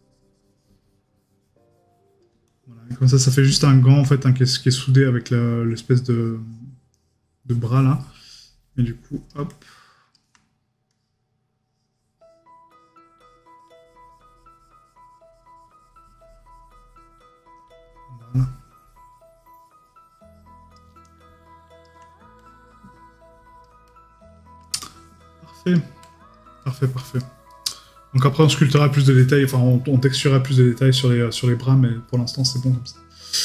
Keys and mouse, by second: 26.6 right click, 27.7 middle click, 28.3 right click.